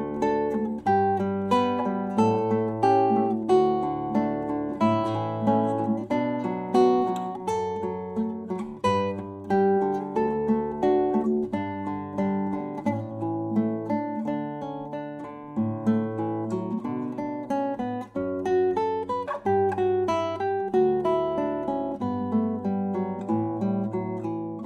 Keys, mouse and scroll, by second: 7.2 Tab, 12.1 Escape, 14.4 Tab, 15.6 x, 17.1 shift+a, 24.3-24.6 drag.